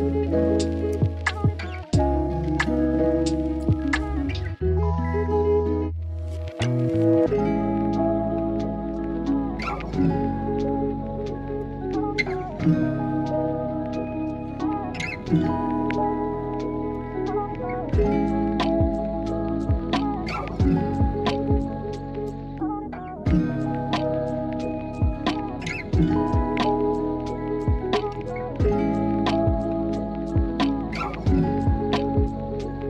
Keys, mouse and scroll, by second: 0.6 KP_3, 1.6 middle click, 2.6 click, 3.4 KP_1, 4.0 shift+middle click, 5.4 ctrl+r, 6.5 s, 8.2 click, 9.1 ctrl+b, 11.5 ctrl+click, 13.1 s, 14.1 ctrl+z, 14.4-15.4 drag, 16.0 s, 17.4 middle click, 19.0 click, 20.0 s, 20.6 click, 20.8 click, 21.7 ctrl+r, 23.0 click, 23.4 middle click, 24.9 click, 26.5 i, 28.3 e, 30.1 s, 31.3 KP_1.